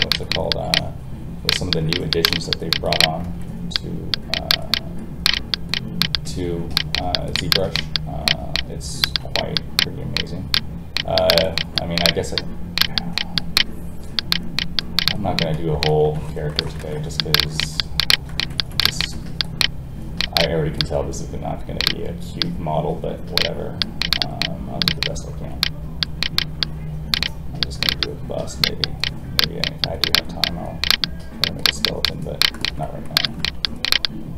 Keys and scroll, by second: 3.2 alt+a, 15.5 ctrl+z, 20.5 ctrl+Escape, 25.3 alt+a.